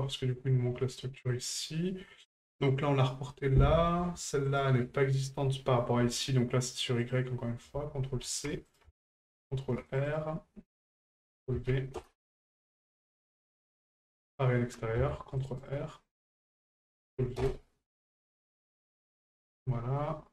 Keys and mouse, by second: 1.0 middle click, 4.5 right click, 7.1-8.8 drag, 10.9-12.0 ctrl+drag, 13.0-13.3 shift+middle drag, 16.5 ctrl+click, 18.2 shift+middle drag, 18.8 middle drag, 19.2 shift+middle drag.